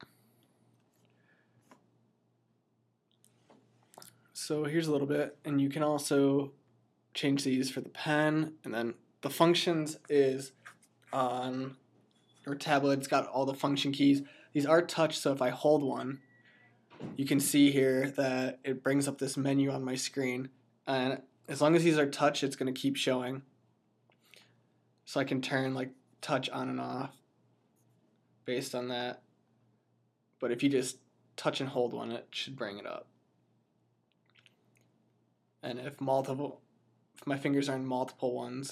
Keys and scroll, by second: 1.6 F9.